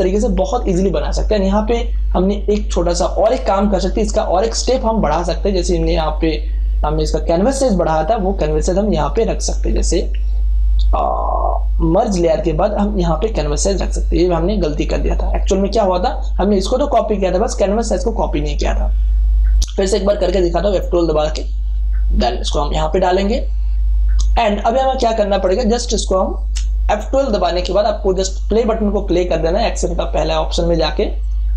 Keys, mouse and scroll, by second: 2.2-9.4 drag, 12.4 alt+click, 12.4-20.0 alt+drag, 20.0 F12, 21.3 click, 24.4 scroll up 1, 25.0 space, 25.4-28.9 ctrl+drag, 28.8 scroll up 1, 29.4 scroll up 1, 30.4 scroll up 1, 31.2 click.